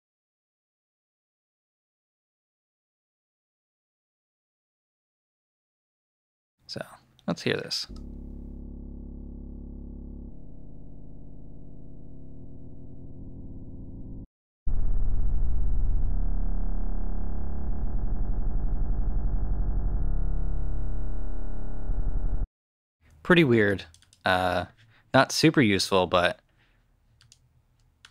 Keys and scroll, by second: 7.7 alt+space, 8.3 space, 14.1 alt+space, 22.2 space.